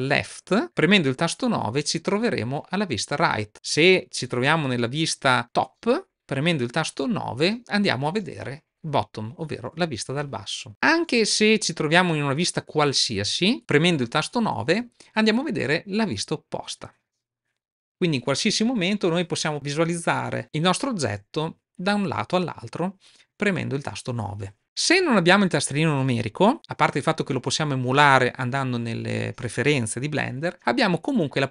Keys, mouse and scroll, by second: 3.0 KP_7, 5.4 KP_7, 10.0 KP_7, 11.1-12.7 middle drag, 13.0-14.9 middle drag, 14.6 KP_7, 18.3 KP_7.